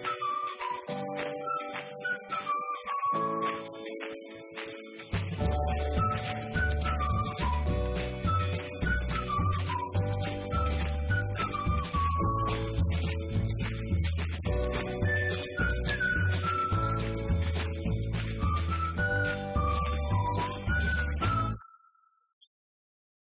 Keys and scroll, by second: 6.5-7.7 typing, 12.6-16.2 typing.